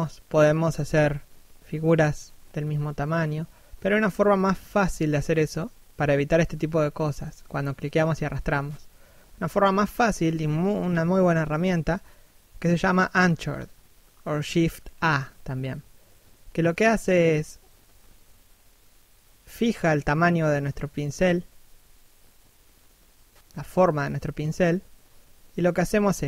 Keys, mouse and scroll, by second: 0.9 middle click, 2.7 click, 4.9 middle click, 5.8 middle click, 6.0 1, 6.8 ctrl+1, 14.3 click, 17.4 middle click, 21.0 click, 22.0 middle click, 24.0 click, 25.5 click.